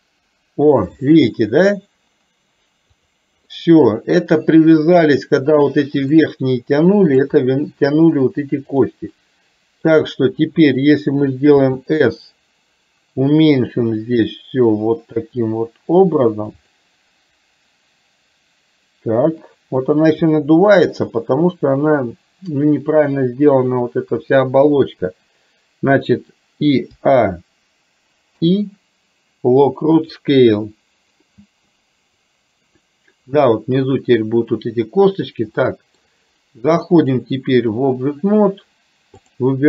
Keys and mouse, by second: 3.0 click, 3.6-4.1 middle drag, 6.3-7.3 middle drag, 8.8 click, 9.3-9.9 middle drag, 20.4-21.0 middle drag, 35.6-36.1 middle drag, 37.1 click.